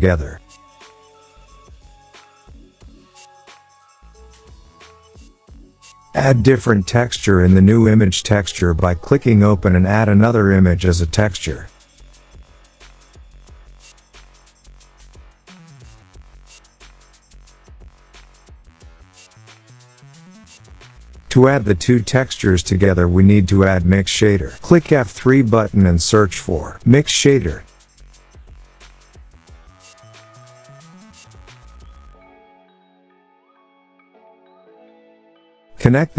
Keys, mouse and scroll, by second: 1.5 click, 2.0-4.0 scroll, 7.3 scroll, 8.9 click, 11.4 click, 11.7 click, 12.9 scroll, 16.0-16.3 scroll, 17.0-17.7 scroll, 20.2 click, 20.2-21.2 scroll, 21.2 click, 22.5 F3, 25.1-25.5 typing, 26.6 i, 27.6 x, 30.2 click, 32.2 click, 34.5 click.